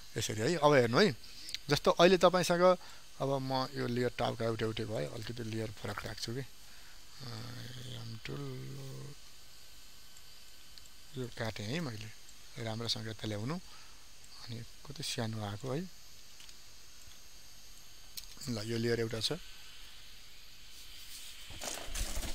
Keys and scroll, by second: 16.1 ctrl+t.